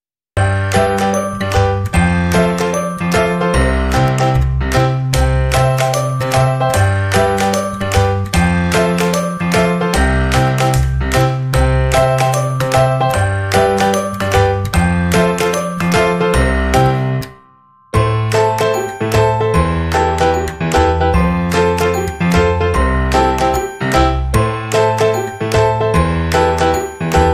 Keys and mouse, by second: 1.2 ctrl+r, 4.7 k, 8.3 k, 11.1 k, 14.6 k, 17.3 KP_3, 18.9 middle click, 19.9 shift+middle click, 20.3 middle click, 21.5 KP_3, 22.0 middle click, 22.5-23.5 middle drag, 23.5 shift+right click, 24.4 c, 25.2 middle click, 25.7 c.